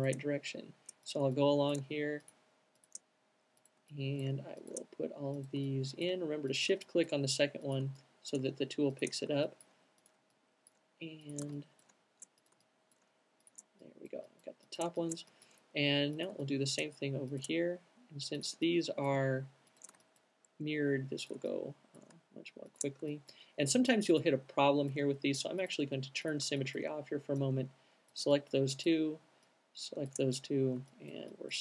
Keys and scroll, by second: 30.9 q.